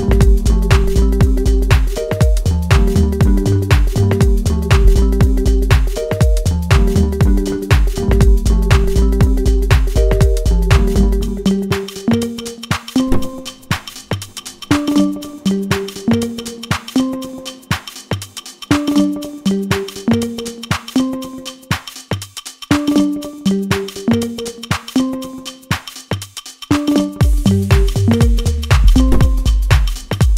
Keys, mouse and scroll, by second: 0.4 middle click, 0.8 Tab, 1.3 click, 1.8 Tab, 2.5 click, 5.2-6.6 middle drag, 6.6 g, 8.8 middle click, 9.7 s, 10.6 middle click, 11.4 g, 12.5-14.1 middle drag, 14.3 e, 15.7 scroll down 1, 15.9 middle click, 16.6 click, 19.6-21.2 middle drag, 21.2 g, 23.6 click, 24.6-26.2 scroll up 1, 26.2 g, 27.4 e, 30.1 e.